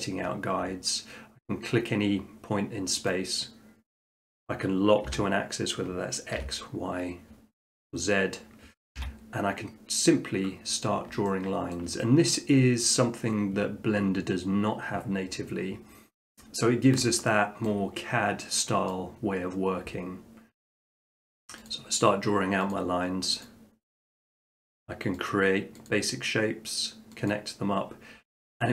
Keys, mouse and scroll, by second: 3.1 click, 4.1 click, 5.1 x, 6.4 y, 9.0 y, 9.3-10.1 middle drag, 10.7 middle click, 11.7 shift+middle click, 12.4 middle click, 16.5 middle click, 16.7 middle click, 17.6 shift+middle click, 18.0 middle click, 18.9 scroll, 20.7 click, 21.3 middle click, 21.7 click, 22.7 click, 23.4 click, 24.0 click, 24.6 click, 25.3 click, 25.9 click, 27.3 click.